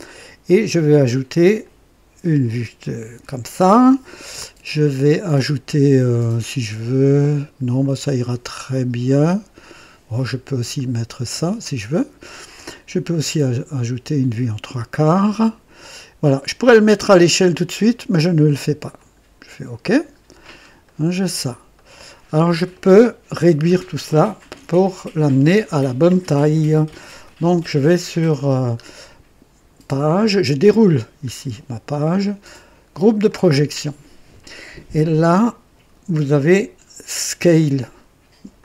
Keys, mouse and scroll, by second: 1.5 click, 10.7 click, 13.7 click, 18.9 click, 20.1-20.5 scroll down 1, 20.7-21.5 right drag, 21.6 right click, 22.6-23.5 middle drag, 26.9-27.2 scroll down 1, 28.5 scroll down 1, 30.6 click, 31.2-31.7 scroll down 1, 33.2 click, 38.5 click.